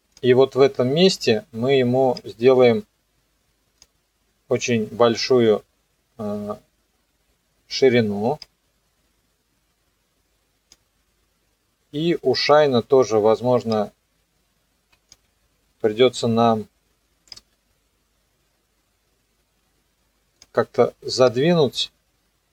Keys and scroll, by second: 15.8 ctrl+z.